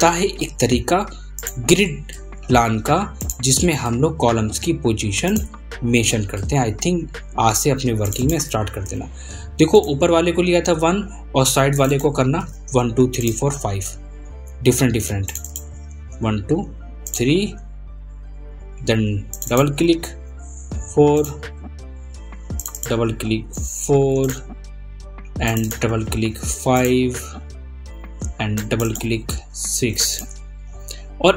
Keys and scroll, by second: 7.0 ctrl+a, 10.6 ctrl+a, 14.2 ctrl+a, 18.3 ctrl+a, 21.5 ctrl+a.